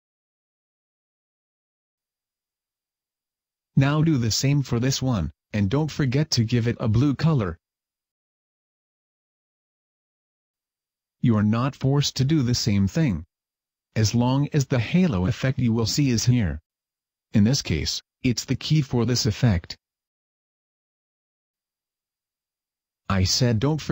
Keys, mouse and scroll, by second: 4.1 right click, 6.1 click, 6.7 click, 11.7 click, 15.5 click, 19.9 click.